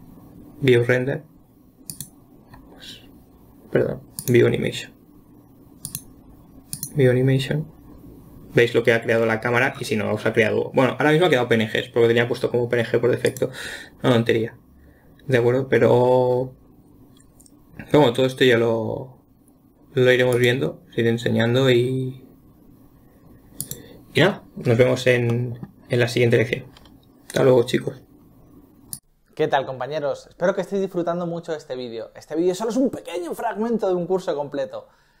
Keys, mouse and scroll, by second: 6.3-9.4 drag, 20.8-23.9 drag, 25.7-35.2 middle drag.